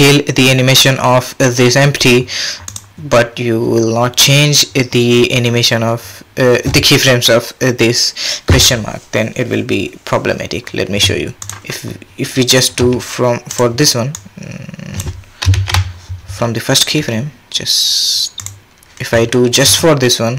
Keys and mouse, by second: 2.7 click, 12.8 s, 14.1-15.0 drag, 15.5 shift+Left, 17.0 s, 19.6 space.